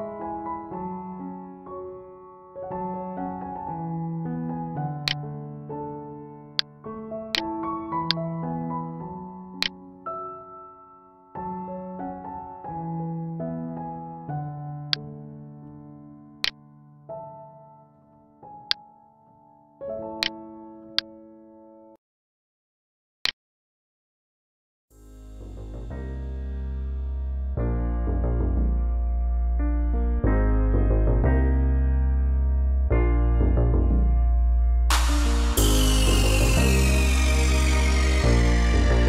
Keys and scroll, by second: 11.7 ctrl+d, 24.8 ctrl+d.